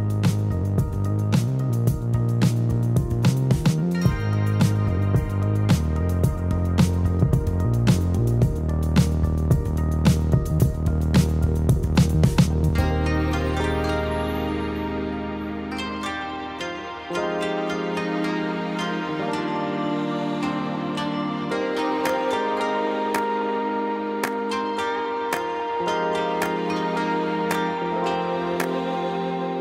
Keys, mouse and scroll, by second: 0.3 r, 2.6-4.1 typing, 3.7 alt+middle click, 5.3 r, 6.4-9.3 typing, 10.5 middle click, 11.0 s, 11.8 s, 12.5 g, 13.2 alt+middle click, 13.9-16.8 typing, 17.5 middle click, 18.2 scroll down 2, 18.4 middle click, 18.9 s, 19.8 middle click, 20.1 s, 20.9 s, 21.8 scroll down 1, 21.8 middle click, 22.0 scroll up 1, 22.0 Tab, 22.2 scroll down 5, 22.4-23.3 middle drag, 23.3-23.8 scroll up 4, 23.8 o, 27.8 ctrl+s, 28.0 right click, 29.0 ctrl+s.